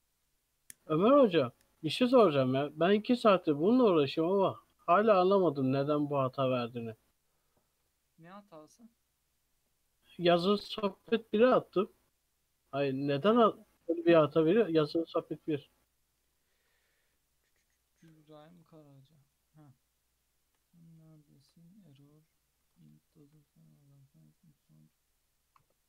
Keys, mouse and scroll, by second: 12.8-13.2 scroll down 2, 13.2 click, 13.4-14.1 middle drag, 14.1 KP_3, 15.6 click, 16.5-17.2 scroll up 2, 17.2-18.0 shift+middle drag, 18.0-18.6 shift+scroll up 3, 18.6-20.4 shift+middle drag, 20.4-21.2 shift+scroll down 3, 21.2-22.6 shift+middle drag, 22.6 ctrl+s, 23.0 shift+middle drag, 23.3-23.8 scroll down 2, 23.8 click.